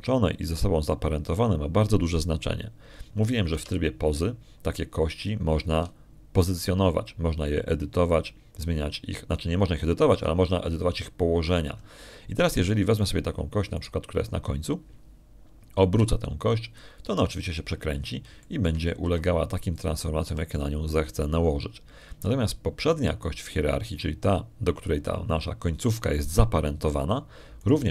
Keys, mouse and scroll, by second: 5.4 Tab, 14.8 right click, 15.6 right click, 17.9 r, 18.3 click, 19.2 middle click, 19.8 middle click, 20.3 shift+click, 20.9 shift+r, 21.6 shift+click, 22.1 r, 22.8 shift+click.